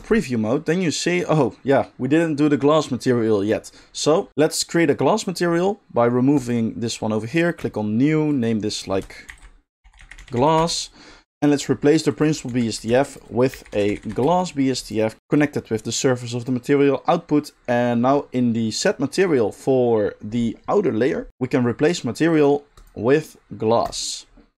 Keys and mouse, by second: 0.0 click, 0.7 middle click, 2.8-6.3 middle drag, 6.3-8.4 drag, 8.4 middle click, 8.7-12.2 drag, 10.3 s, 12.2-15.3 middle drag, 12.5 x, 12.9 shift+a, 15.3-21.3 drag, 21.3-22.3 middle drag, 22.3 drag, 22.8-24.5 drag.